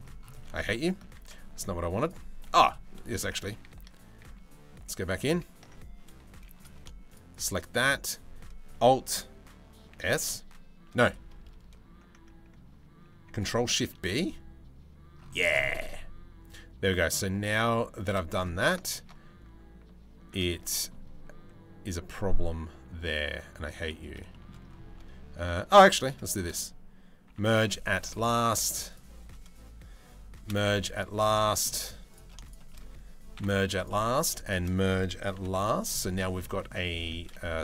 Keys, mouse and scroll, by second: 0.8 ctrl+z, 1.5 2, 1.6 click, 2.1 1, 3.1 ctrl+z, 3.3 ctrl+z, 4.4 ctrl+z, 4.8 ctrl+z, 6.0 z, 7.4 z, 9.5 alt+s, 9.5 scroll, 13.4 ctrl+shift+b, 18.6 ctrl+r, 26.9 m, 28.0 click, 30.1 m, 31.1 shift+middle click, 33.0 m, 35.8 middle click, 36.2 shift+middle click, 37.5 middle click.